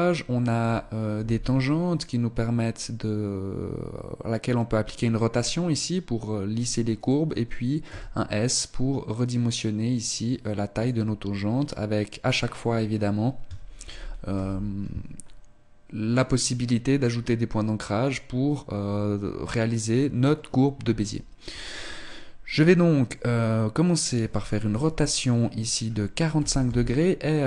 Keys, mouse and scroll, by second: 1.2 r, 7.9 s, 13.9 ctrl+z, 14.5 ctrl+z, 16.2 right click, 21.6 right click, 24.8 r.